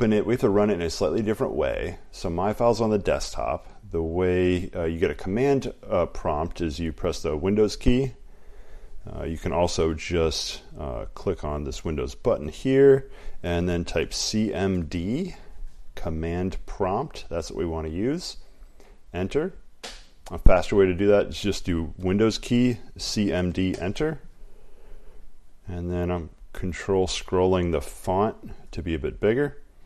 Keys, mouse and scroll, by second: 0.6 click, 7.3 click, 10.3 click, 12.0 click, 19.0 click, 20.6 click, 21.4 click, 22.2 click, 23.2 click, 23.9 typing, 25.9 typing, 26.0-27.8 ctrl+scroll, 28.3 click.